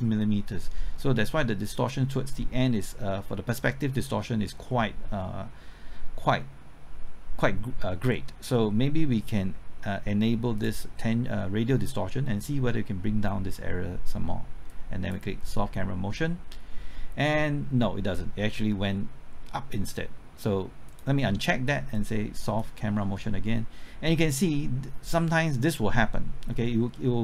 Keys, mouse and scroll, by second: 10.6-15.7 drag.